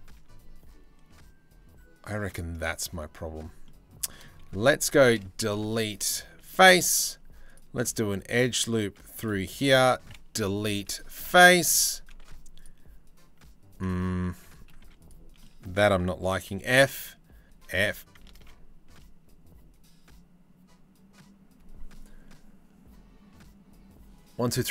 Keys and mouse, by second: 2.6 click, 3.3 click, 3.8 click, 4.2 3, 4.5 click, 5.1 Delete, 6.7 ctrl+r, 9.3 3, 10.0 Delete, 10.9 click, 11.1 middle click, 11.4 2, 11.9 ctrl+r, 13.9 ctrl+z, 14.4 2, 14.6 click, 15.0 click, 16.1 f, 17.1 f, 18.0 ctrl+z.